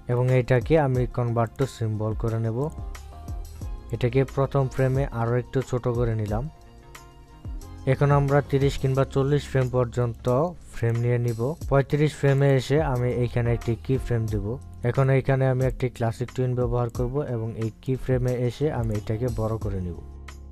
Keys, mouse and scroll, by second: 1.3 click, 1.9 right click, 3.2 click, 5.2 click, 5.6-14.1 shift+drag, 14.7 right click, 14.9 click, 16.5 right click, 17.5 click.